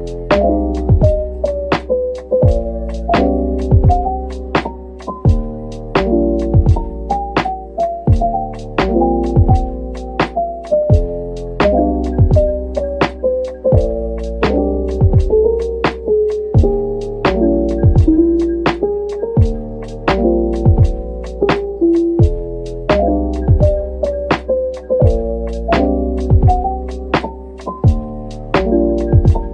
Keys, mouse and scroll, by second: 0.0-0.3 scroll up 1, 0.3-1.7 scroll down 1, 2.1-3.0 scroll up 1, 3.4 typing, 5.1 middle click, 6.3-6.7 scroll up 1, 7.5 2, 9.2 shift+click, 9.9 shift+click, 10.1 ctrl+b, 12.4-12.9 scroll up 1, 13.2 Tab, 13.5 scroll down 1, 13.8 middle click, 15.7 Tab, 16.8 ctrl+l, 17.6 typing, 20.3 middle click, 23.9 scroll up 1, 24.6-25.3 typing, 27.3 middle click, 29.0-29.5 typing.